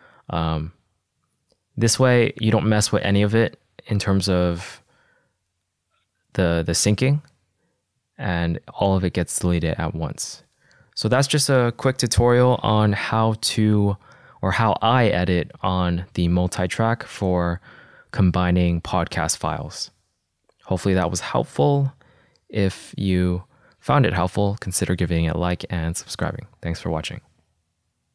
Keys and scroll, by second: 13.5 super+z.